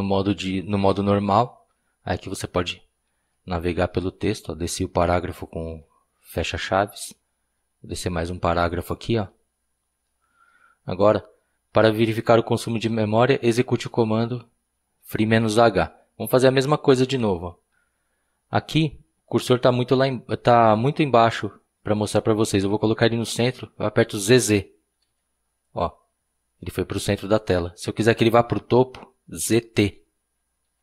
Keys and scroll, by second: 2.9 }, 10.0 }, 17.2-17.7 typing, 25.0 typing, 30.4-30.8 typing.